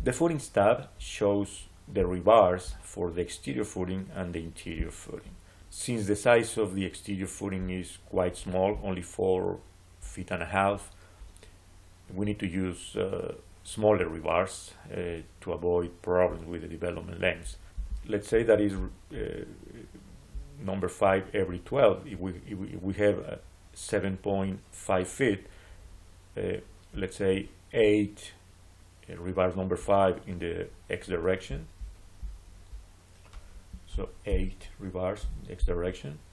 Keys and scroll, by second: 34.1 8, 35.1 Return.